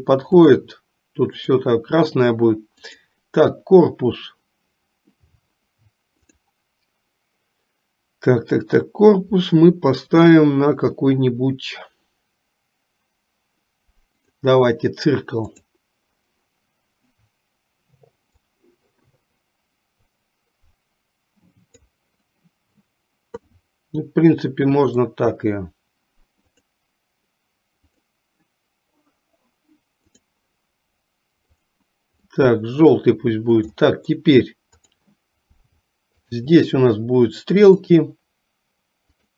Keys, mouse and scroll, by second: 2.8 click, 6.4-14.6 drag, 15.6 click, 18.5-21.9 drag, 23.6-25.1 middle drag, 26.5 click, 28.0-30.3 drag, 31.7 click, 32.4 middle click, 34.0 middle click, 35.0 click, 36.2 shift+click, 38.0-39.3 drag.